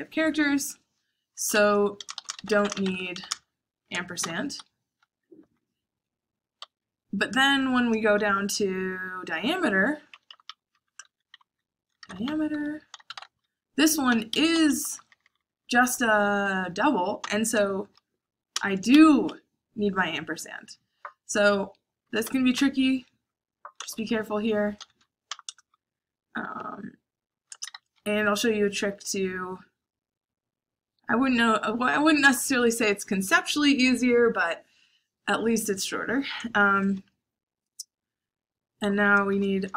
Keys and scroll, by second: 1.3-5.3 typing, 4.5 Escape, 6.6 o, 7.4 shift+9, 8.1 shift+8, 9.8-16.0 typing, 18.5 shift+7, 18.9 Escape, 22.1-23.7 typing, 24.9 o, 25.2 BackSpace, 25.4 Return, 27.6 shift+7, 36.6 shift+9, 39.3-39.7 typing.